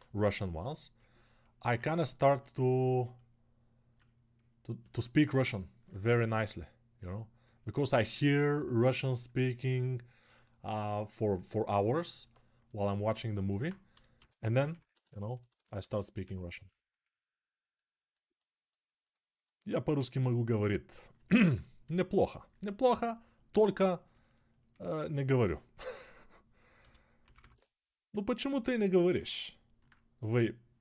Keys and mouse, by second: 13.9 g, 14.4 ], 14.5-15.8 ], 26.5 g, 27.0 [, 27.1 [.